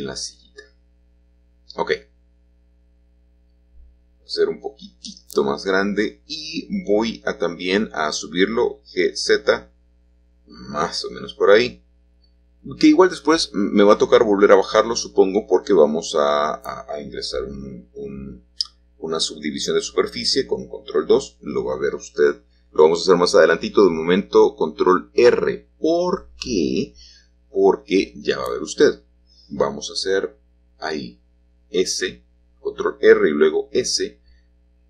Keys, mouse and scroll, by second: 2.0-4.7 shift+drag, 5.1-9.2 drag, 11.6 shift+click, 17.6-19.2 drag, 21.9-23.1 drag, 23.1 middle click, 24.0 g, 25.8 x, 28.8 click, 29.5-30.8 middle drag, 31.4-34.8 drag.